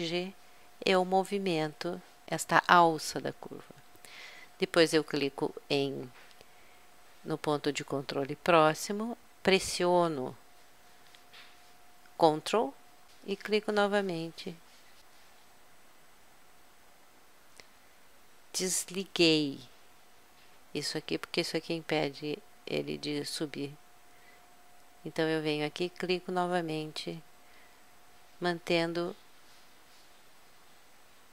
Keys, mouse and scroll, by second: 2.3 click, 5.1-6.8 drag, 13.7-15.1 drag, 16.2-17.9 drag, 25.6-27.2 drag, 27.5 middle click, 30.2 middle click.